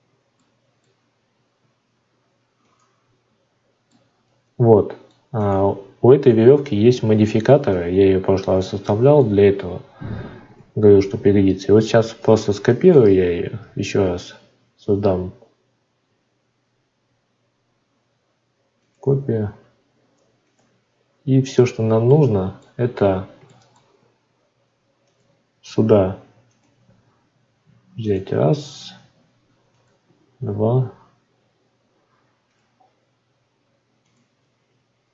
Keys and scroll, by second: 12.0 shift+d.